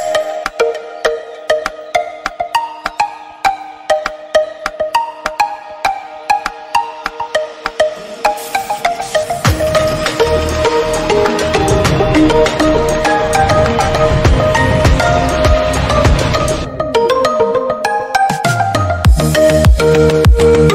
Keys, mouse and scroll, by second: 0.3 scroll up 2, 0.6-1.9 middle drag, 2.5 shift+d, 3.2 middle click, 3.5 scroll down 1, 3.6-4.1 middle drag, 4.1 g, 4.6-5.1 middle drag, 5.1 scroll down 1, 5.3 scroll up 2, 5.5 middle click, 5.6 click, 6.0 shift+d, 6.5 middle click, 6.9 scroll down 4, 7.0-7.5 middle drag, 7.5 click, 8.1 middle click, 8.2 scroll up 1, 8.4 middle drag, 8.7 scroll down 3, 8.7-9.1 middle drag, 9.1-9.5 scroll up 2, 9.5 middle click, 10.0 scroll up 1, 10.2-10.6 middle drag, 10.6 scroll up 1, 10.8-12.9 middle drag, 12.9 click, 13.0 Delete, 13.4 click, 13.5 Delete, 13.7 drag, 13.7 Delete, 14.0 click, 14.0 Delete, 14.2 middle click, 14.5 click, 14.6 Delete, 14.7 middle click, 15.0 click, 15.1 Delete, 15.2 middle click, 16.0 click, 16.2-18.2 middle drag, 18.9 click, 19.0-19.6 middle drag, 19.6 click, 20.1-20.7 middle drag.